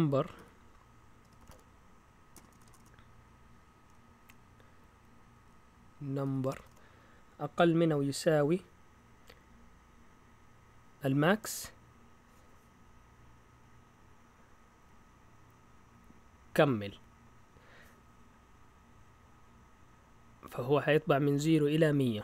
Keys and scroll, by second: 0.0-2.7 typing, 6.0-7.1 typing.